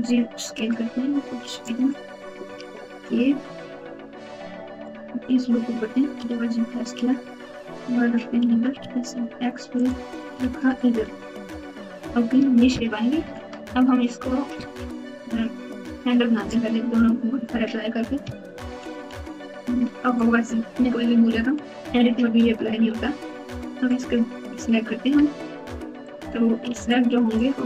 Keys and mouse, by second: 4.8 click, 5.9 g, 8.4 s, 10.4 alt+z, 11.1 Tab, 16.5 Tab, 18.7 ctrl+a, 19.0 ctrl+a, 20.7 Tab, 22.4 ctrl+a, 22.6 ctrl+a, 23.5 Tab, 26.0 click, 26.7 alt+z, 26.9 click.